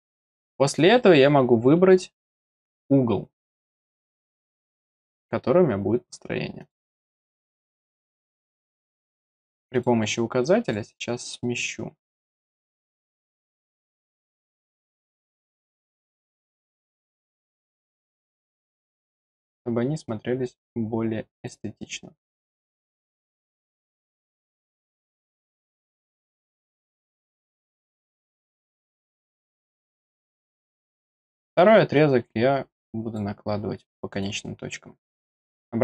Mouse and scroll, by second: 0.0 click, 6.6 click, 7.7 middle click, 9.7 click, 10.6 click, 15.0-16.4 drag, 17.8 click, 18.7 scroll down 1, 19.2-21.4 drag, 23.6 click, 24.4 click, 25.2 click, 26.1-27.2 drag, 28.3 click, 29.2 click, 29.7 scroll down 2, 30.0 middle click, 30.6 middle click, 31.1-33.1 drag, 34.1 click, 35.2 click.